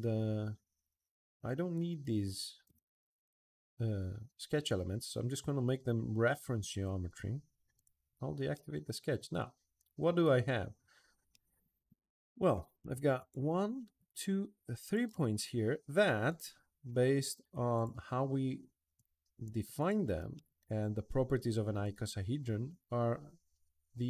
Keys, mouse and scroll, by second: 1.1 click, 7.5 click, 8.3-10.4 middle drag, 10.7 middle drag, 11.0-12.3 middle drag, 12.9 click, 13.8 shift+click, 14.6 shift+click, 15.1 middle click, 16.0 click, 17.5 click, 18.7 shift+click, 19.6 shift+click, 20.1-23.4 middle drag.